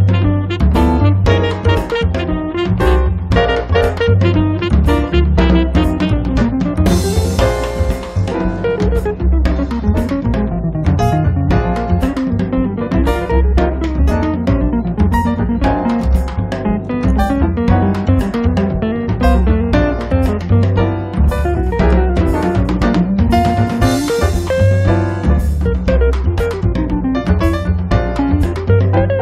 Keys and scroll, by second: 2.0 space, 4.6 Escape, 7.1 p, 11.9 space, 15.1 m, 17.6 p, 22.4 space, 26.3 space.